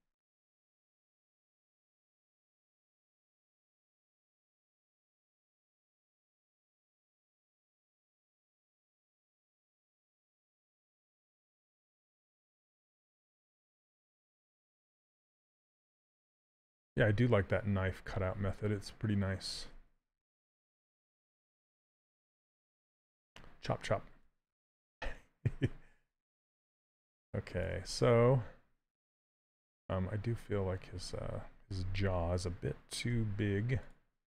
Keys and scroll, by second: 0.7 s, 32.8 w.